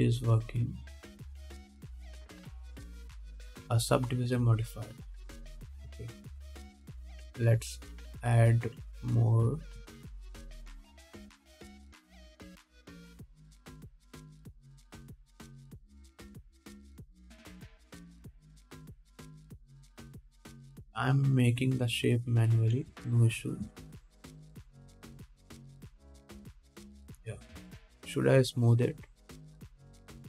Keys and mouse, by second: 7.0 Tab, 7.5 alt+a, 8.7-9.4 drag, 9.4-11.2 drag, 10.7 2, 11.2 alt+middle click, 11.3-23.8 alt+drag, 12.6 s, 14.1 e, 14.6 s, 15.5 g, 19.9 g, 24.3-27.0 shift+drag, 25.0 ctrl+Tab, 26.3 middle click, 26.3 right click, 27.9 ctrl+Tab, 27.9-30.2 drag.